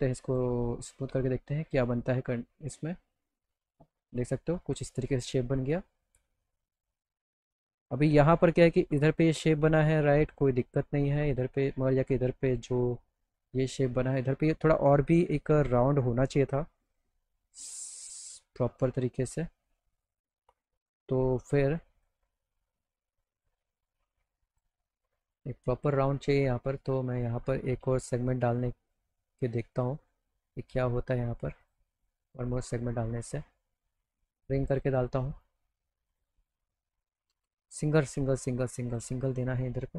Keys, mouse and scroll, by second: 0.3 click, 1.7 click, 2.4-3.5 alt+middle drag, 7.5 alt+middle click, 8.0 alt+middle click, 10.6 click, 20.5 click, 21.0 middle click, 22.0 click, 24.5 click, 26.8 click, 27.6 alt+middle click, 28.4 right click, 29.8 click, 30.4 right click, 31.7 click, 34.7 click, 35.3 click, 36.1 click, 37.4 ctrl+z, 37.7 right click, 38.9 click.